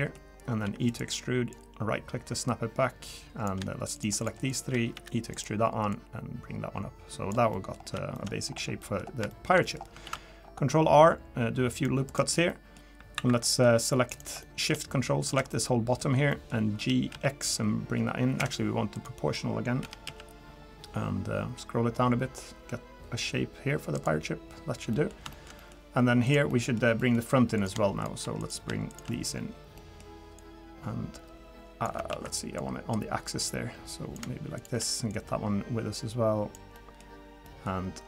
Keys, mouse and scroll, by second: 0.0 middle click, 0.6 e, 1.5 click, 3.9 shift+click, 4.9 e, 5.9 click, 7.5 middle click, 7.8 scroll up 3, 8.1 shift+middle click, 8.4-8.8 scroll down 2, 8.8 middle click, 9.3 shift+middle click, 9.6 middle click, 10.0 ctrl+r, 12.5 middle click, 13.1 2, 13.5 middle click, 14.1 click, 14.4 middle click, 15.2 ctrl+shift+click, 15.5 middle click, 16.3 middle click, 16.8 g, 18.9 click, 19.8 g, 24.9 middle click, 25.3 shift+middle click, 25.6 middle click, 26.2 click, 26.5 middle click, 27.0 middle click, 27.0 shift+middle click, 27.6 click, 28.0 shift+click, 28.4 click, 28.9 shift+click, 29.8 middle click, 30.4 click, 32.1 ctrl+z, 32.6 click, 34.6 shift+click, 35.1 click, 36.7 middle click, 37.0-37.6 scroll up 3, 37.4 middle click.